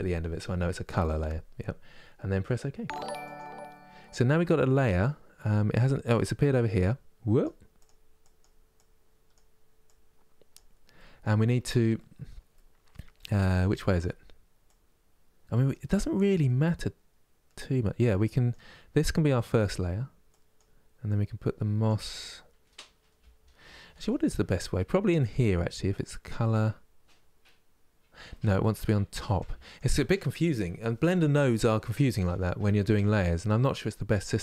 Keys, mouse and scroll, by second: 20.8 click, 24.9-34.4 drag.